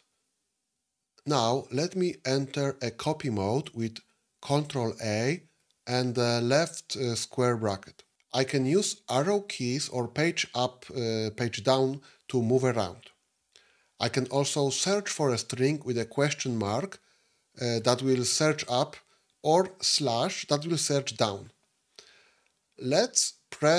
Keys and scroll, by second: 4.4 ctrl+a, 6.6 [, 19.8 /.